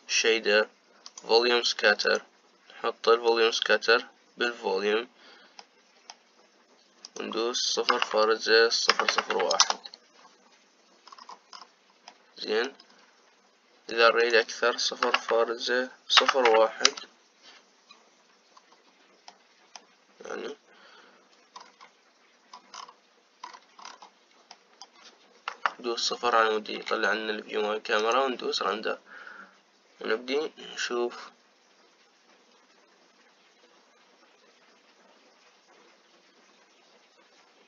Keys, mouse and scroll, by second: 4.0 click, 6.3-7.7 middle drag, 7.7-9.8 drag, 9.8 KP_0, 11.8-12.8 scroll down 5, 12.8 middle click, 13.4-14.2 scroll up 2, 14.2-14.9 scroll up 1, 14.9-19.3 drag, 19.3-20.0 scroll up 2, 20.0-22.0 middle drag, 22.0-23.5 scroll up 5, 23.5-24.1 scroll down 6, 24.1-24.9 scroll up 10, 25.2 middle click, 26.2 KP_0, 27.4 z.